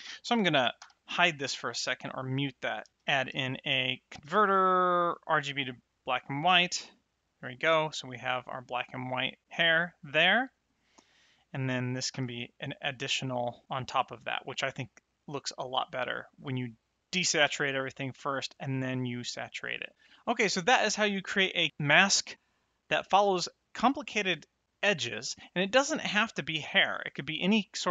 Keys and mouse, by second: 0.7 m, 1.3 middle click, 2.9 shift+a, 4.9 click, 10.2 middle click, 11.0 click, 12.1 m, 17.0 click, 22.4 middle click.